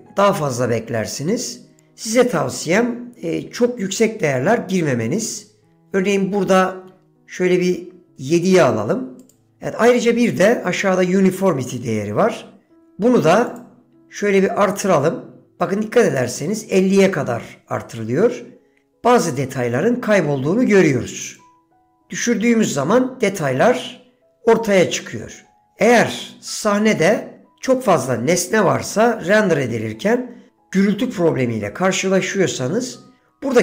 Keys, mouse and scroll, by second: 1.9-9.4 drag, 13.6 click, 14.4-16.3 drag, 21.5-25.7 drag.